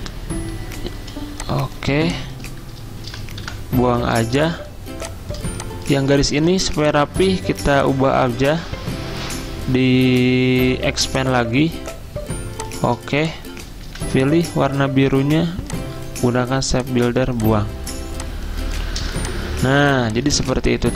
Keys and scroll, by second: 1.0-4.3 typing, 5.4 v, 13.8 v, 19.0 v, 19.9 z.